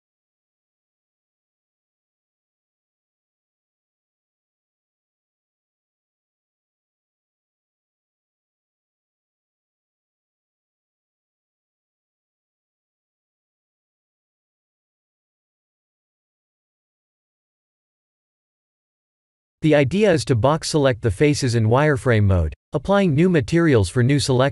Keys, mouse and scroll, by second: 1.8 click, 8.7 click, 9.1 ctrl+s, 13.4 click, 14.1 shift+z, 17.7 click, 19.3 Tab, 21.9 3, 23.3 1.